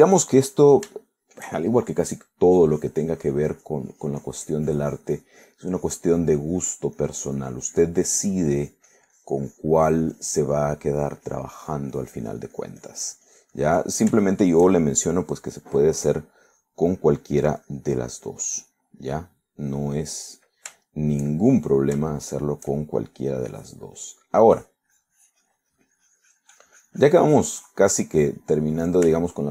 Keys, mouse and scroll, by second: 1.3 middle click, 2.1 shift+middle click, 2.9 shift+middle click, 3.9-11.6 drag, 11.7 middle click, 12.3 click, 12.7-15.1 drag, 15.3 shift+middle click, 16.7 click, 18.0 middle click, 18.6 click, 19.1 click, 19.9 click, 20.1 click, 20.7 click, 21.2 middle click, 23.2 shift+middle click, 23.9 shift+middle click, 24.6 shift+click, 25.1 middle click, 25.6-29.5 drag.